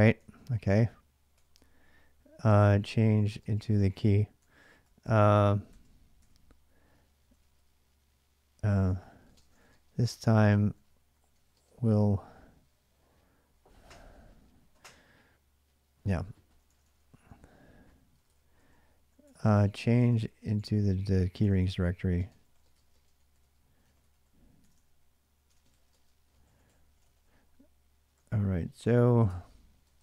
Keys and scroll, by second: 0.0 ctrl+a, 0.3 ctrl+a, 1.1-7.1 typing, 1.3 Return, 8.7-11.7 typing, 15.9-16.5 BackSpace, 16.6 BackSpace, 16.8 BackSpace, 16.9 BackSpace, 17.9 Return, 18.1 Return, 18.3-30.0 typing.